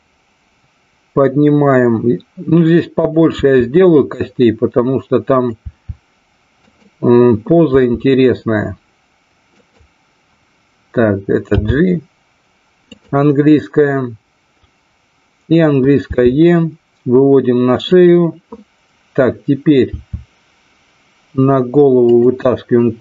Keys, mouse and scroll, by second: 2.9 click, 3.3 e, 5.3 click, 5.5 e, 6.5 click, 9.5 click, 11.5 g, 12.9 click, 15.9 e, 17.9 click, 19.8 e, 22.1 click.